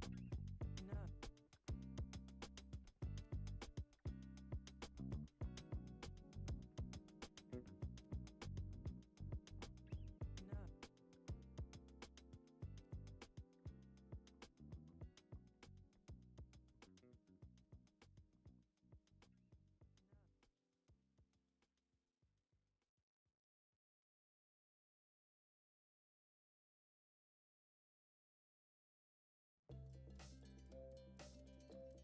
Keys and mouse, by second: 1.1 click, 2.1-2.5 middle drag, 3.0 KP_1, 4.0-4.4 shift+middle drag, 5.3 shift+d, 6.3 s, 8.9 g, 8.9 x, 9.5 shift+a, 12.0 g, 14.3 Tab, 15.2 alt+z, 15.5-17.3 drag, 17.7 alt+z, 18.3 g, 20.7 ctrl+r, 22.0 Tab, 22.9 right click, 23.9 s, 25.6 s, 26.5 g, 27.5 r, 31.4 shift+d.